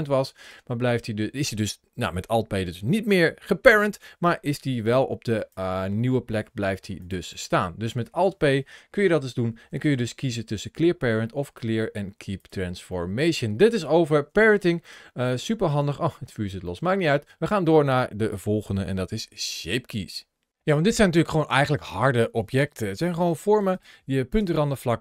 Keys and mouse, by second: 6.2-6.7 ctrl+shift+middle drag, 7.1-7.8 middle drag, 9.6 alt+p, 12.7-13.2 middle drag, 14.2 shift+middle click, 14.6-15.5 middle drag, 16.5 shift+middle click, 17.0 middle click, 21.2 click, 23.5 right click, 23.5 g, 24.2 Tab.